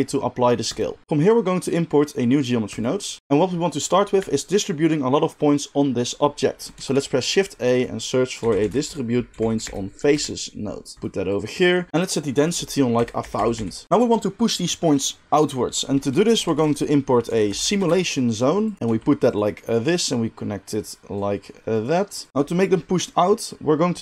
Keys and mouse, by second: 2.7-11.0 drag, 6.7 shift+a, 11.0-11.4 middle drag, 11.4-19.4 drag, 13.3 0, 13.5 0, 16.4 shift+a, 18.8 g, 18.8 g, 19.4-20.0 middle drag, 20.0-24.0 drag.